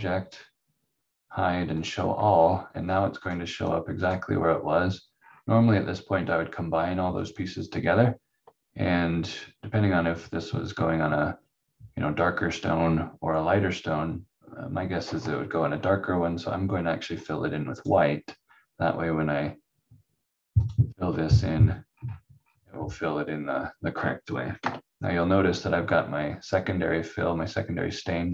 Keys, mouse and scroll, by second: 2.3 scroll down 1, 3.7 click, 5.1 scroll up 1, 7.1 click, 17.1 click, 21.9-22.3 scroll down 1, 22.9 scroll up 1, 23.4-24.6 scroll down 1, 24.6 F4.